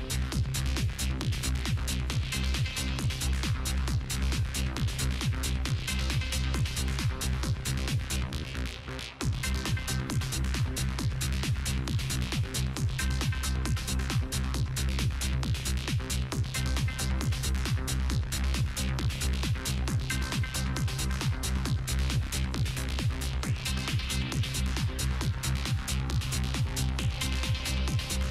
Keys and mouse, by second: 0.6-5.7 drag, 6.1-12.5 drag, 12.5-13.2 middle drag, 13.2-14.8 right drag, 13.5 Tab, 14.8-16.6 drag, 16.6 middle click, 17.3 right click, 17.6 click, 18.4 r, 20.1 s, 21.9 click, 22.8 Tab, 26.0 KP_7, 27.2-28.3 drag, 27.4 Tab.